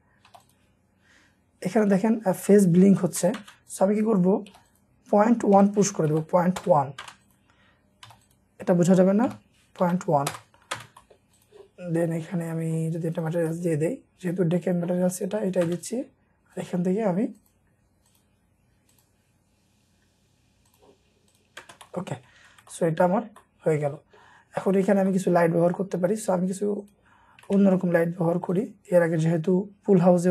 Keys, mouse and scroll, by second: 0.3 typing, 1.8 Escape, 2.8-3.2 scroll down 1, 3.2 middle click, 3.3 space, 4.0-4.5 scroll up 1, 4.5 typing, 5.6-7.0 typing, 6.6 Return, 8.1 typing, 9.3-10.8 typing, 10.3 Return, 10.6 scroll down 1, 11.0 middle click, 13.3 double click, 15.7 space, 19.4-20.1 scroll down 1, 20.1-20.6 scroll up 1, 21.6 scroll down 1, 21.6 space, 21.8 scroll up 1, 21.9 middle click, 21.9 scroll, 22.1 scroll down 1, 22.4 Escape, 22.6 Escape, 22.7-23.3 scroll up 1, 23.3 middle click, 23.3-23.9 scroll, 23.9 middle click, 24.5 scroll up 1, 25.1 middle click, 25.6 scroll up 1, 27.5 shift+middle click, 27.8-28.2 shift+scroll down 1, 28.2-30.3 scroll up 1.